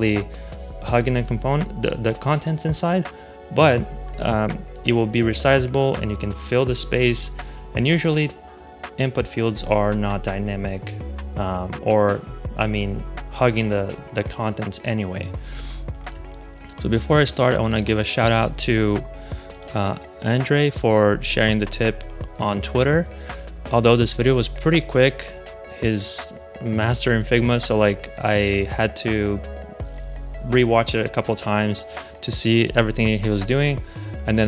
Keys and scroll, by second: 16.0 space.